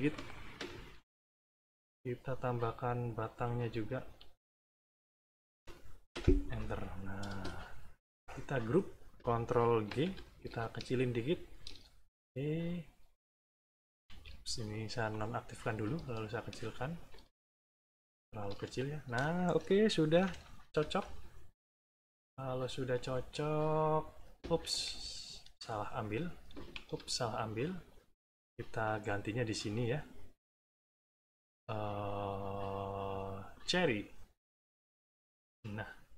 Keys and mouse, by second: 0.5 Return, 1.0 middle click, 2.4 click, 3.0-4.0 drag, 4.1 shift+click, 4.8 click, 6.1 Return, 8.0 click, 9.8 ctrl+g, 10.7 ctrl+shift+click, 11.9 ctrl+shift+middle click, 14.0 ctrl+z, 15.0 click, 16.1 ctrl+shift+click, 17.7 ctrl+shift+click, 18.7 ctrl+shift+middle click, 20.1 -, 20.6 =, 22.0 click, 23.5 click, 24.6 ctrl+z, 25.1 ctrl+middle click, 25.7 click, 26.7 ctrl+z, 28.8 click, 30.5 click, 33.5 click, 34.6 click.